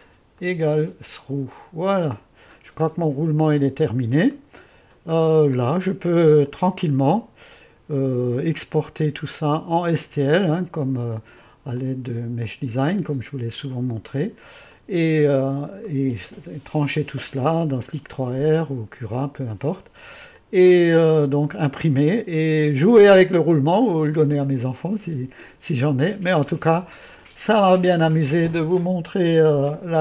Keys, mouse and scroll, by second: 4.3-5.6 drag, 5.6 middle click, 6.5 click, 15.9 middle click, 17.1-19.5 middle drag, 19.5-23.1 drag, 23.3-23.9 scroll up 1, 23.9 scroll down 1, 24.4-29.4 drag.